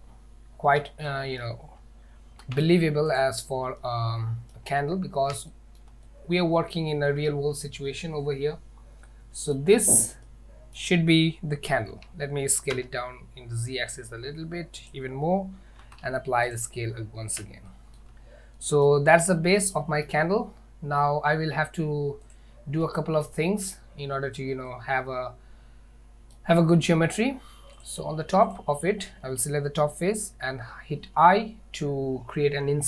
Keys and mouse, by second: 1.2-1.5 shift+middle drag, 2.5 ctrl+a, 3.9-4.6 middle drag, 5.6 shift+middle drag, 6.1-6.8 middle drag, 9.1-9.6 middle drag, 10.3-10.8 middle drag, 12.0 s, 15.9 ctrl+a, 17.7-18.1 shift+middle drag, 18.6-18.9 middle drag, 19.2 Tab, 19.8 middle click, 22.3 click, 23.0 shift+middle click, 24.7-26.4 middle drag, 27.8 click, 28.5 click.